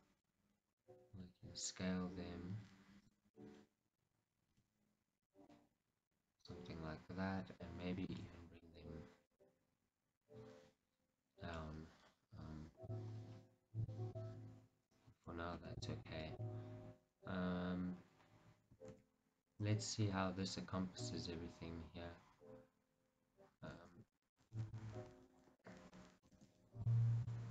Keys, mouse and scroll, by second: 1.2 s, 3.2 click, 3.5-5.4 middle drag, 4.6 s, 5.4 click, 5.6-8.2 middle drag, 8.2 g, 9.5 right click, 10.3-14.3 middle drag, 13.5-13.9 scroll, 21.4-23.6 middle drag, 24.2 middle click, 24.7 shift+z.